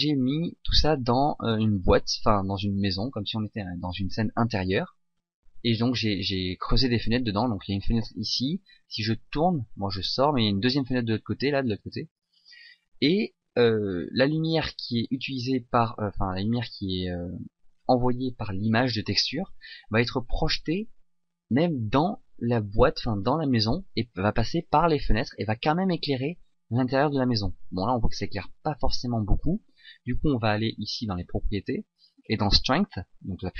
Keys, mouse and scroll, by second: 8.4 middle click, 16.1 middle click.